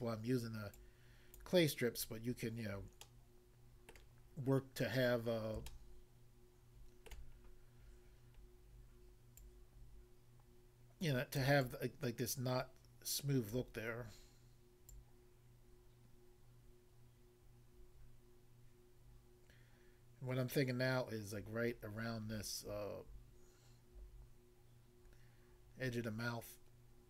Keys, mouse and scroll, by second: 0.7 shift+click, 2.3 scroll down 1, 3.0 middle click, 4.0 middle click, 5.1 scroll up 1, 5.2 middle click, 5.7 shift+middle click, 6.3 scroll up 1, 7.4-7.8 scroll up 1, 7.9-8.4 scroll up 1, 8.4 scroll down 1, 9.4 click, 11.4 click, 11.7 click, 13.5 click, 15.0 click.